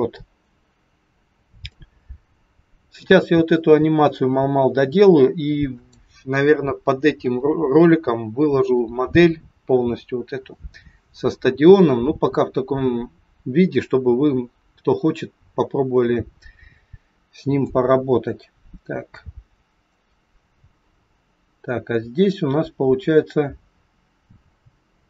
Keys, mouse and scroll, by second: 1.7 click, 17.7 click.